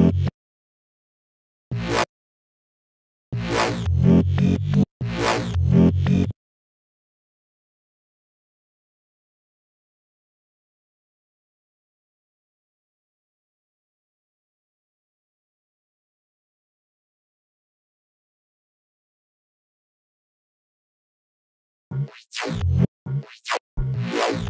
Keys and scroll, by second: 0.1 super+2, 1.1 super+space, 2.3 super+space, 2.4 super+2, 2.7 super+space, 5.7 space, 9.7 b, 11.6 b, 21.3 space.